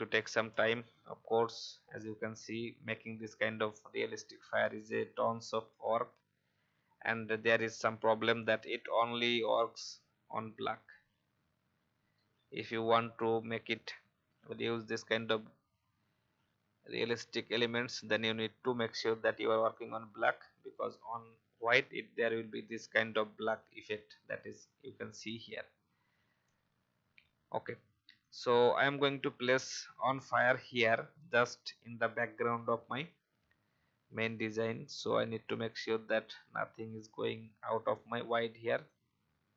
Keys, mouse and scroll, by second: 0.4-2.4 alt+scroll down 1, 5.7 alt+scroll down 1, 9.4-20.3 alt+shift+drag, 25.1-26.3 alt+scroll up 1, 26.4-27.2 alt+scroll up 1, 28.1-39.5 drag.